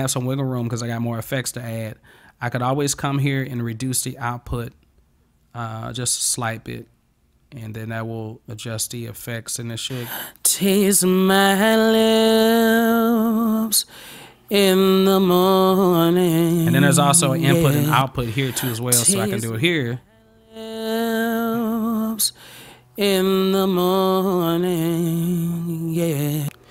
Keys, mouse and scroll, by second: 2.9 click, 3.6-6.5 drag, 7.7 click, 9.8 click, 19.0-26.3 drag.